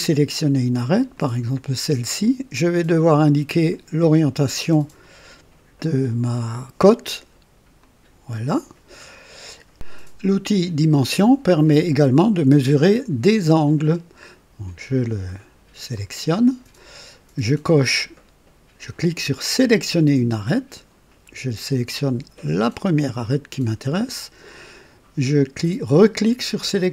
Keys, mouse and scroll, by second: 1.1 click, 7.7 click, 9.7 click, 15.9 click, 19.5 click, 22.5 click, 26.6 click.